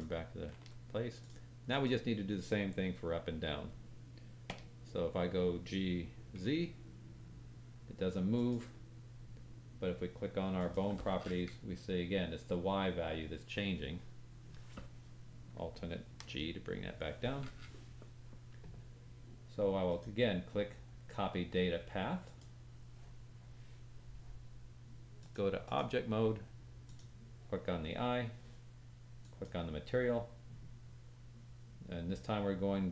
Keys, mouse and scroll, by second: 0.5 alt+g, 1.1 click, 1.6 click, 4.5 g, 10.5 click, 15.5-24.9 alt+drag, 16.2 alt+g, 19.8 right click, 25.1-26.9 drag, 29.2 click.